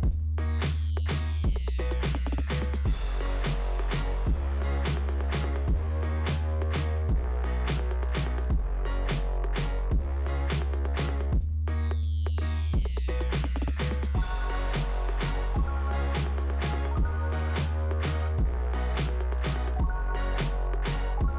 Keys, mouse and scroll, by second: 0.9 click, 1.0 click, 2.4 click, 4.2 click, 5.5 middle click, 6.1 click, 8.6 click, 9.2 scroll up 1, 10.8 click, 11.3 click, 12.3 click, 13.1 click, 14.1 click, 14.9 click, 16.1 click, 21.1 click.